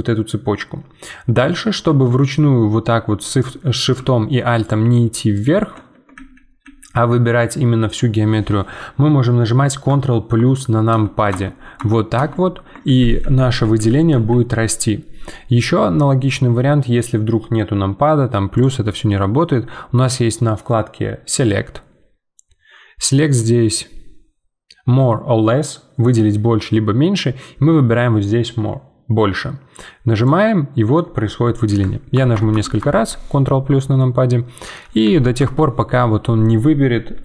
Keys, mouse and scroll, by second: 0.7-2.2 scroll down 3, 2.2 shift+middle click, 2.5-4.6 scroll up 1, 4.6 alt+shift+click, 6.1 ctrl+z, 6.6 ctrl+z, 10.3 ctrl+KP_Add, 10.9 ctrl+KP_Add, 12.8 ctrl+z, 13.2 ctrl+z, 18.5-32.1 drag, 32.1 ctrl+KP_Add, 32.3 ctrl+KP_Add, 33.7 scroll down 3, 34.0-35.4 middle drag, 35.4 ctrl+KP_Add.